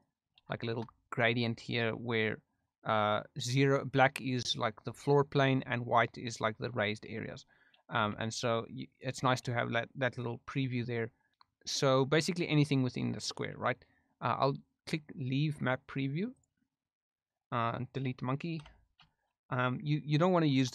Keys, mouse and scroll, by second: 0.5 shift+middle drag, 7.9 s, 8.8 right click, 9.4 s, 10.1 right click, 16.3 click, 18.5 Delete, 20.5 g.